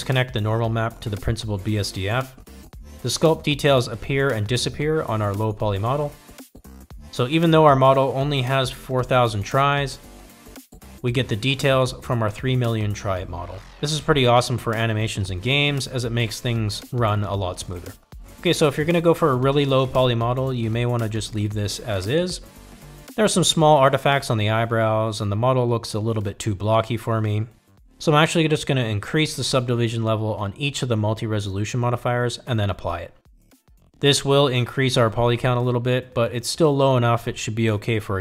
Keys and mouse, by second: 1.8 click, 3.5-5.5 drag, 7.1-7.6 middle drag, 9.1 click, 10.4-11.4 drag, 18.1 middle click, 22.7 click, 25.3 click, 29.9 click, 31.9 click, 34.5 click.